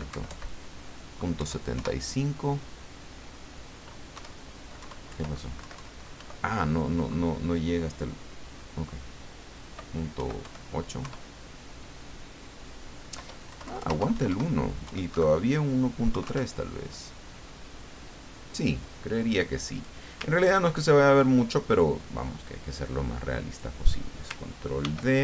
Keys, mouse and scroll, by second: 0.1 Right, 1.4 KP_7, 1.7 KP_Enter, 4.1 KP_7, 4.8 Left, 5.6 Right, 6.2 Delete, 10.2 KP_8, 10.4 KP_5, 11.0 KP_Enter, 13.5 BackSpace, 14.0 Delete, 14.8 KP_1, 15.1 KP_Decimal, 16.1 KP_3, 16.2 KP_Enter, 19.7 click, 20.3-20.7 ctrl+scroll down 2, 21.1 ctrl+click, 21.5 middle click, 22.4-23.9 drag, 24.8 ctrl+d.